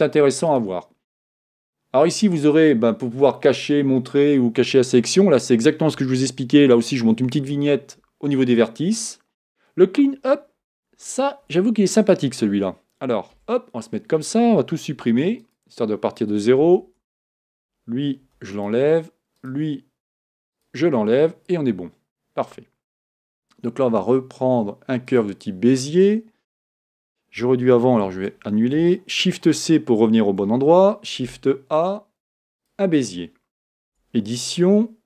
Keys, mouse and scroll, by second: 0.5-3.5 drag, 13.4 KP_7, 15.0 x, 16.9 Tab, 17.4 click, 18.3 x, 19.4 click, 20.3 x, 23.3 shift+a, 28.1 z, 29.3 shift+c, 30.7 shift+a, 33.9 Tab.